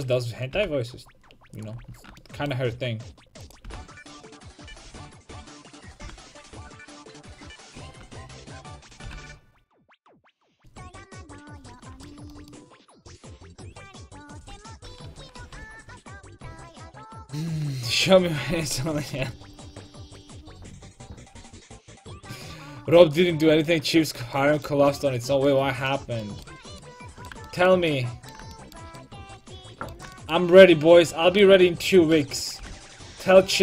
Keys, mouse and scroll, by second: 0.0-1.7 right drag, 0.5 g, 1.7-3.6 drag, 1.8 a, 3.4-7.9 right drag, 3.6 g, 4.7 a, 6.0 g, 6.8-9.1 drag, 6.9 a, 8.8-10.0 right drag, 9.1 g, 10.2 a, 12.4 middle click, 15.2 KP_5, 15.4 KP_1, 23.7 middle click, 24.6-25.8 middle drag, 26.4 right click, 27.0 click, 27.0 right click, 31.9-33.6 right drag, 32.6 g.